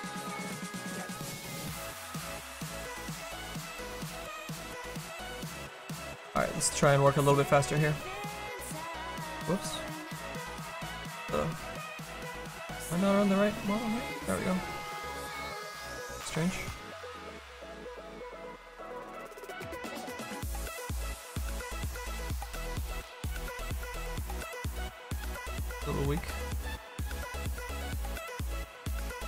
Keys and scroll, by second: 17.7 s, 18.1 s.